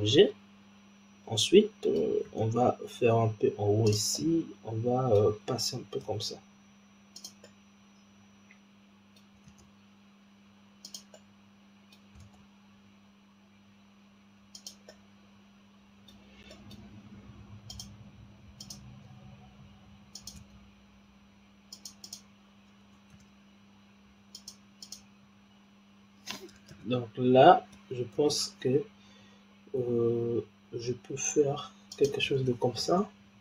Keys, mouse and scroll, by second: 2.2 shift+d, 4.1-6.0 middle drag, 6.0 g, 7.4-9.4 middle drag, 9.4 shift+d, 11.1-12.2 middle drag, 12.2 shift+d, 14.8-17.6 middle drag, 17.6 click, 18.5 click, 20.0 click, 20.3 s, 21.9 click, 23.0 shift+d, 24.7 click, 26.6 ctrl+z, 28.0 s, 32.7 shift+d.